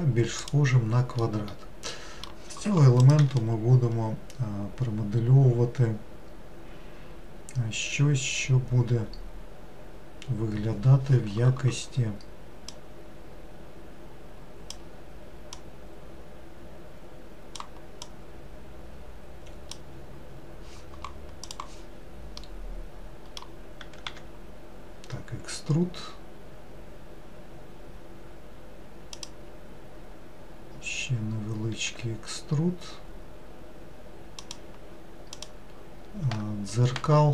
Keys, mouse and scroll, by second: 1.3-4.4 middle drag, 12.8 click, 15.6 click, 18.1 click, 22.5-24.1 middle drag, 24.1 e, 32.0 e, 35.4 click.